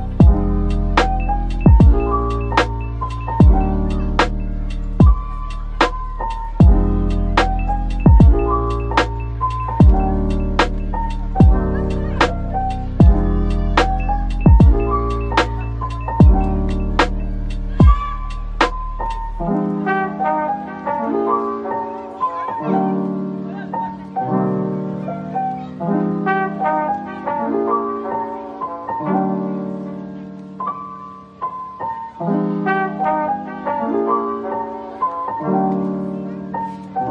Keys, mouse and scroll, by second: 0.6-1.7 scroll up 1, 1.7 scroll up 1, 2.0 ctrl+l, 4.6-6.9 scroll down 1, 6.9 typing, 17.5-20.5 scroll down 1, 29.3-30.4 typing, 31.3 double click.